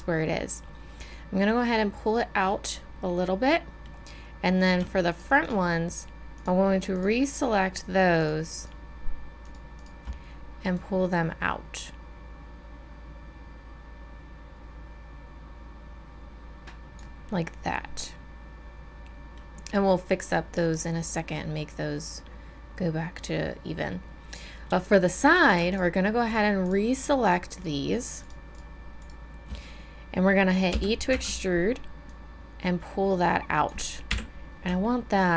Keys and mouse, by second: 1.5-10.8 drag, 10.8-14.0 middle drag, 17.3-19.1 middle drag, 30.8 e, 34.1 KP_1.